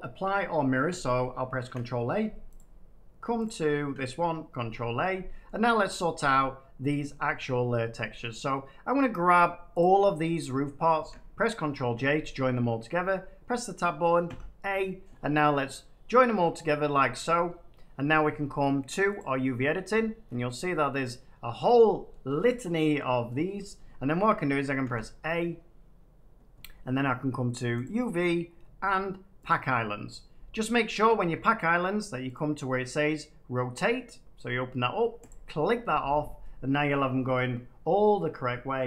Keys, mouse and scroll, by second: 0.8 middle click, 1.4 ctrl+a, 2.5 click, 3.4 click, 4.5 ctrl+a, 5.4 middle click, 6.1 middle click, 7.1 middle click, 8.3 middle click, 9.3 middle click, 9.7 shift+click, 10.5 middle click, 11.5 ctrl+j, 12.5 middle click, 12.8 Tab, 14.2 a, 15.7 middle click, 16.5 middle click, 16.9 scroll up 1, 17.5 scroll up 1, 19.1 click, 19.8-20.3 scroll up 10, 21.0 middle click, 22.0-23.8 middle drag, 24.8 a, 27.8 click, 29.4 click, 32.3-33.3 drag, 35.2 click, 36.8-37.7 scroll, 37.7 middle click, 37.8 Tab, 38.7 shift+middle click.